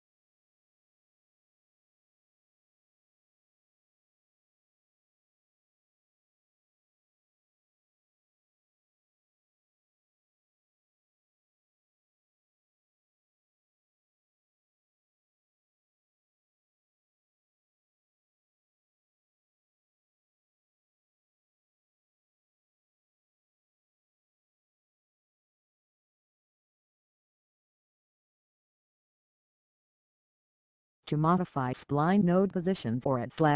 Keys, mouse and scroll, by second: 0.2 click, 8.7 click, 16.6 click, 19.3-20.3 scroll up 1, 22.8 click, 33.3 click.